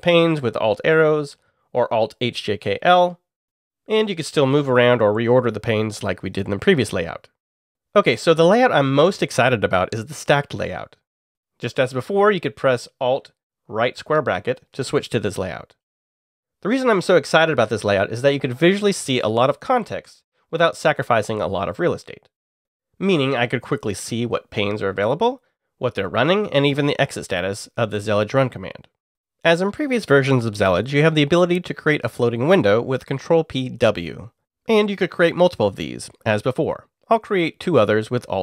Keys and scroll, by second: 0.3 alt+Left, 1.1 alt+Right, 1.4 alt+Right, 14.1 alt+], 23.8 alt+Up, 24.6 alt+Up, 25.7 alt+Down, 26.3 alt+Down, 32.8 ctrl+p, 33.8 w, 37.1 alt+n, 38.1 alt+n.